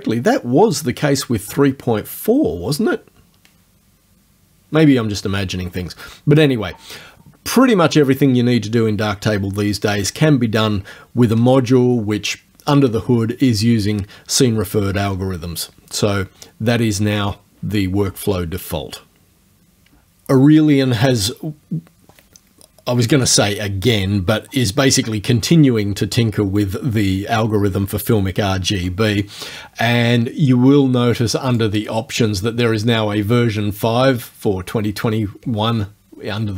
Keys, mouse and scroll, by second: 31.5 click.